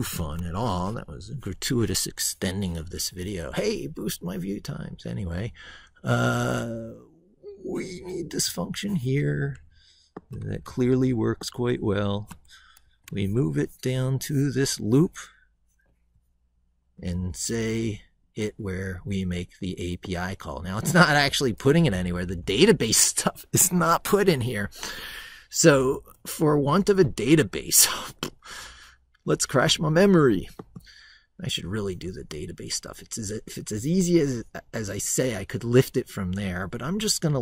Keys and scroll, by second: 0.0 ctrl+v, 12.6 ctrl+c, 21.8 ctrl+v.